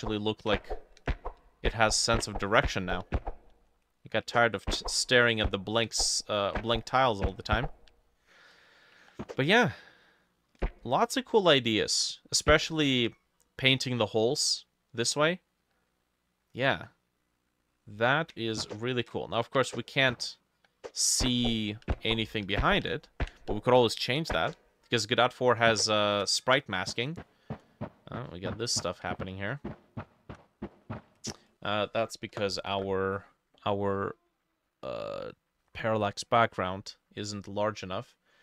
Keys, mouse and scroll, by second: 35.7-37.4 scroll up 6.